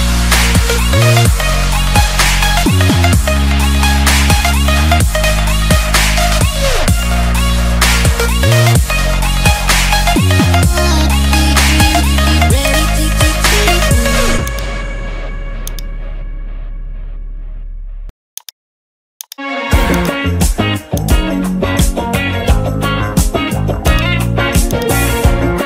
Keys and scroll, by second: 11.0 ctrl+j, 12.1 ctrl+t.